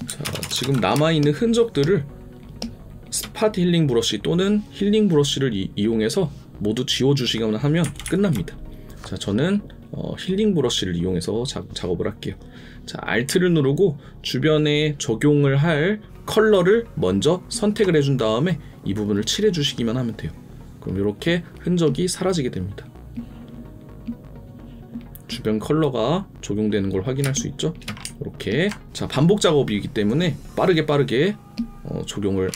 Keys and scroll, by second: 0.2 ctrl+KP_Add, 0.9 space.